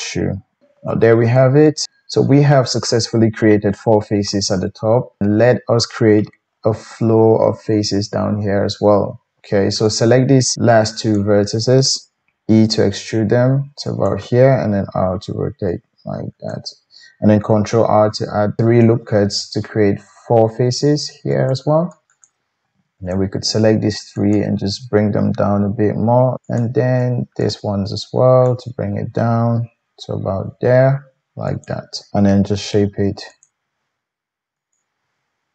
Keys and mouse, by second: 0.3 g, 0.6 shift+KP_1, 1.9 g, 4.7-9.8 middle drag, 9.8 click, 10.0-11.1 middle drag, 11.1 shift+click, 12.1 e, 14.5 r, 17.5 ctrl+r, 17.5-18.6 ctrl+middle drag, 22.1 click, 23.1-23.7 shift+drag, 24.1 shift+click, 25.3 g, 26.4 click, 27.4 shift+click, 28.5 shift+click, 28.6-34.6 shift+middle drag, 29.5 g, 32.4 g, 34.6 click, 34.7 middle click, 35.0 g.